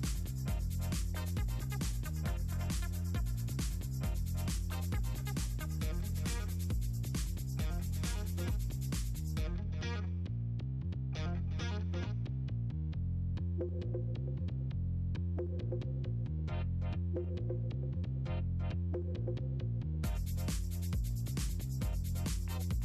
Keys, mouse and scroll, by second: 1.3 click, 3.3 click, 6.0 click, 7.5-7.9 middle drag, 9.3 click, 11.7-12.1 ctrl+scroll up 2, 14.3 middle drag, 15.7-18.9 drag, 21.5 click.